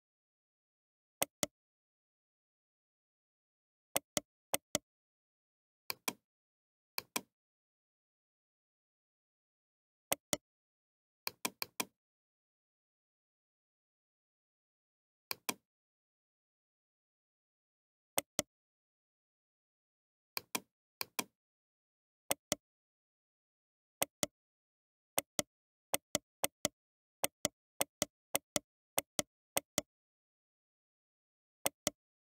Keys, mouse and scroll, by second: 1.2 right click, 2.1-4.5 middle drag, 4.5-6.2 right drag, 6.2-8.8 drag, 10.1-11.8 right drag, 11.8-13.2 drag, 16.4 BackSpace, 18.2-19.3 right drag, 20.1 middle click, 20.4-22.3 drag, 22.3-26.4 middle drag, 25.4 g, 26.4-30.0 right drag, 26.8 g, 28.0 g, 29.3 g, 30.0-31.6 middle drag, 31.6-32.2 right drag.